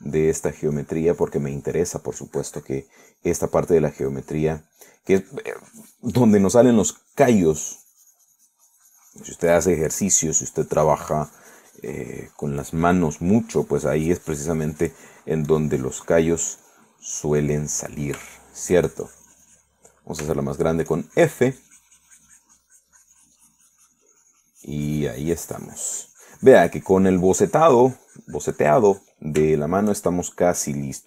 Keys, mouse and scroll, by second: 2.8 click, 3.3-5.0 drag, 5.3-18.2 drag, 18.3 middle click, 19.1-20.5 middle drag, 20.5 shift+click, 21.5 f, 21.9-30.6 drag, 30.8-31.0 shift+middle drag.